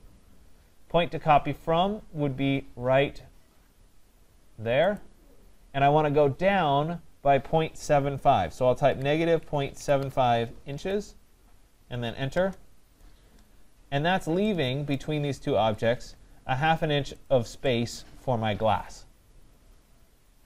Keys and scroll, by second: 12.3 Return.